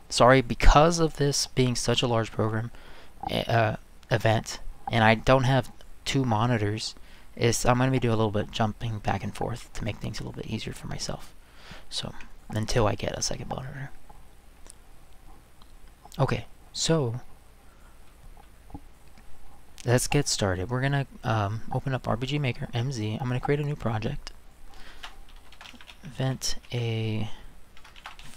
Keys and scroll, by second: 25.3-28.3 typing.